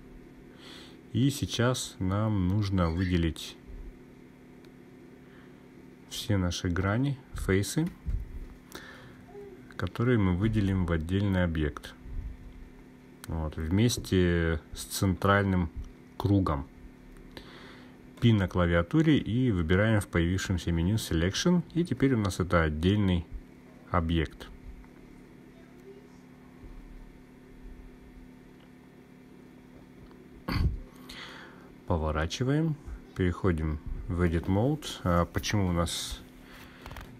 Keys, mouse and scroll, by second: 8.6 click, 11.4-15.1 drag, 18.7 p, 30.7 click, 36.3 e.